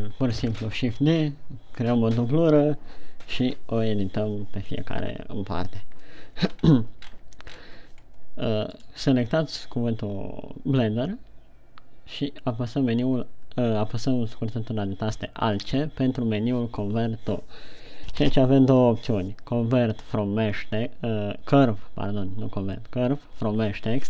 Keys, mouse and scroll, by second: 0.7 scroll down 1, 7.0-7.8 scroll up 5, 8.5-9.1 scroll down 1, 9.3 right click, 16.0 alt+c.